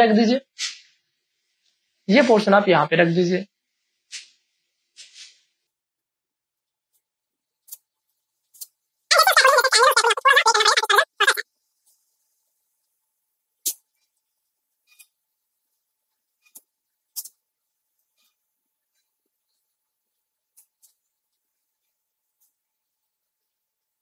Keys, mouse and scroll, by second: 2.5-6.6 drag, 6.5 space, 6.6 ctrl+click, 7.2 click, 8.1 space, 8.2 ctrl+click, 8.3 click, 9.3 click, 10.5 ctrl+space, 10.6 ctrl+click, 10.8 click, 12.0 click, 13.7 alt+click, 13.9 space, 14.0 ctrl+click, 14.2 click, 15.1 click, 16.0 space, 16.1 click, 16.6 click, 17.2 click, 17.9 space, 18.0 ctrl+click, 18.4 click, 19.3 space, 19.4 ctrl+click, 19.8 ctrl+click, 20.2 space, 20.3 ctrl+click, 20.8 click, 21.5 click, 22.3 space, 22.4 ctrl+click, 23.3 click, 23.8 space, 23.9 ctrl+click.